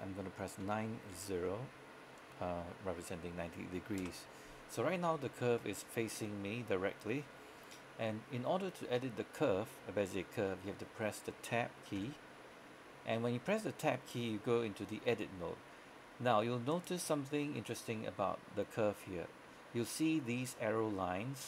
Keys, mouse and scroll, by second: 0.7-1.2 typing, 4.1 Return, 12.1 Tab, 16.8 right click.